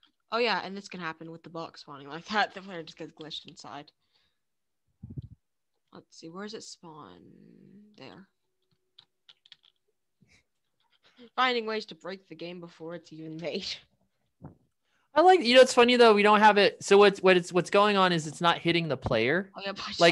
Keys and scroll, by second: 0.1-6.2 typing, 7.3-9.5 typing, 10.6 a, 11.4 a, 12.7 a, 17.5 space, 19.9-20.1 typing.